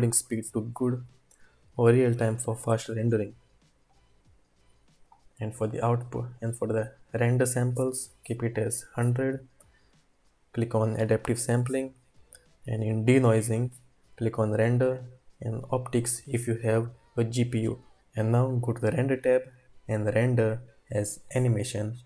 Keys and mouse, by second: 2.0-3.4 drag, 3.9 click, 5.0 click, 15.0-15.9 drag, 19.3-21.7 drag, 19.3 typing.